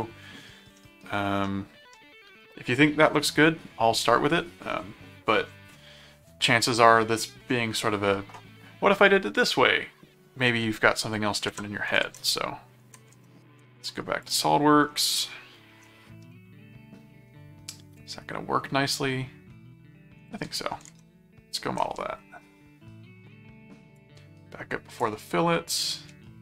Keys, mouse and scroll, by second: 0.8 middle click, 1.4 middle click, 11.5 alt+Tab, 13.1 ctrl+alt+Tab, 14.2 click, 15.2 middle click, 16.3-20.2 middle drag, 20.9 ctrl+Tab, 24.0 click, 25.7 click.